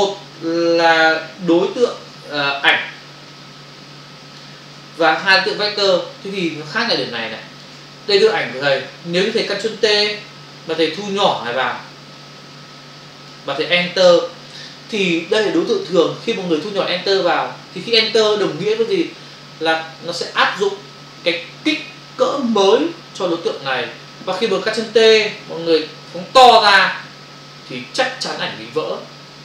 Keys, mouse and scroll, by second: 3.3 alt+click, 5.2 Return, 5.8 click, 6.7 ctrl+click, 8.3 ctrl+click, 11.2 alt+click, 14.0 Return, 26.5 alt+click, 29.2 Return.